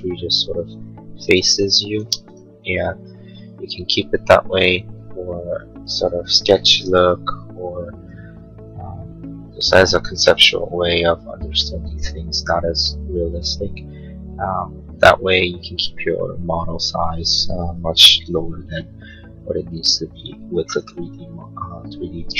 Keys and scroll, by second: 2.0 space.